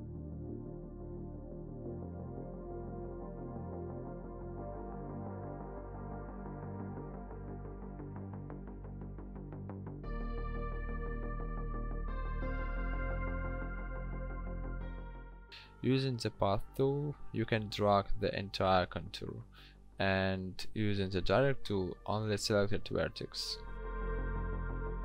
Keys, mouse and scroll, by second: 16.3 a, 18.1 click, 19.1 ctrl+z, 19.7 ctrl+click.